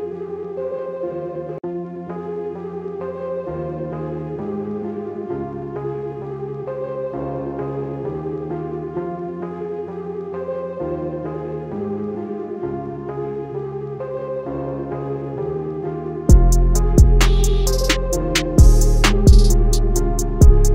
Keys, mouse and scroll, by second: 6.1 click, 6.9 scroll up 1, 8.2 click, 11.2 Escape, 11.9 alt+scroll down 1, 12.1 scroll up 1, 12.8 click, 15.2 click, 18.0 Escape, 18.6 click, 20.0 alt+scroll down 1, 20.6-20.7 scroll up 1.